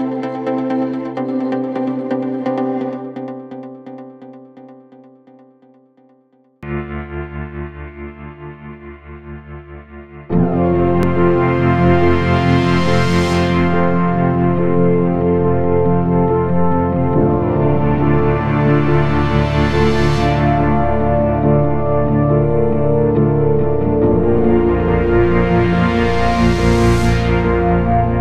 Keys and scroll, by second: 14.8 F3, 15.3 Escape, 16.0 F3, 16.4 Escape, 17.1 ctrl+s, 20.1 F2, 20.4 Escape.